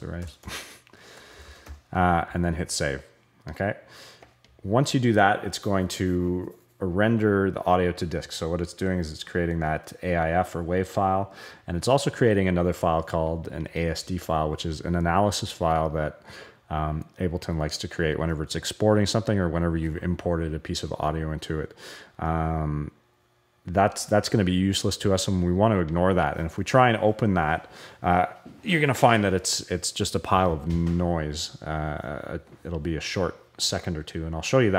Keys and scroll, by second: 0.0-2.1 typing.